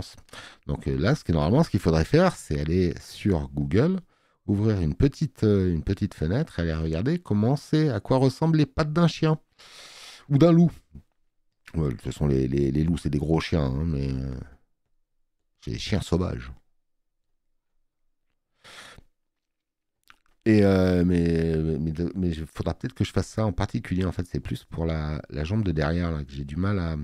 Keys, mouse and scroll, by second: 1.6 space, 2.1 click, 11.5 space, 20.5 space, 20.7 click.